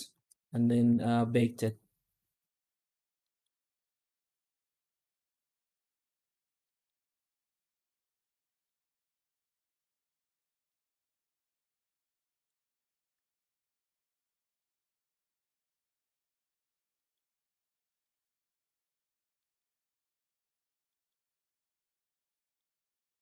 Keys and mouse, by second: 0.7 z, 3.1 middle click, 3.9 alt+shift+z, 5.0 middle click, 6.5 middle drag, 8.0 middle click, 8.6 middle drag, 9.9 middle click, 10.4 middle click, 12.1-13.8 drag, 16.8 middle drag, 17.7 middle drag, 19.3 middle click, 20.7 middle drag, 22.1 middle drag.